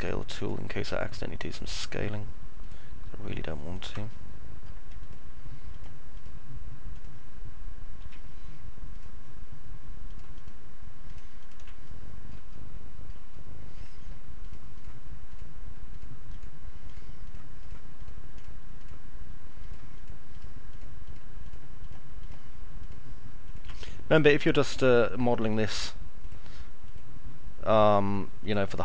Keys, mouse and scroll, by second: 0.8 ctrl+click, 1.6 ctrl+click, 3.6 ctrl+click, 3.9 middle click, 5.6 ctrl+click, 6.8 ctrl+click, 7.9 ctrl+z, 8.8 ctrl+click, 9.9 ctrl+click, 10.9 ctrl+click, 11.8 middle click, 12.6 alt+middle click, 12.9 middle click, 15.1 click, 15.8 click, 16.1 click, 20.1 click, 20.6 click, 23.8 alt+middle click, 24.6 alt+middle click.